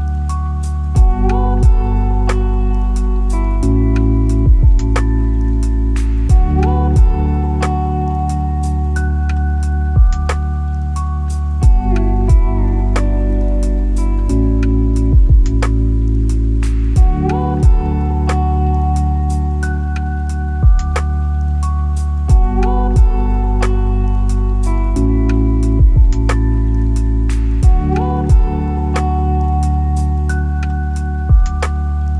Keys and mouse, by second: 9.1 click, 10.1 ctrl+z, 11.1 click, 12.9 click, 14.2-18.9 drag, 21.0 ctrl+i, 24.2-24.7 drag, 27.5 click, 30.5 middle click.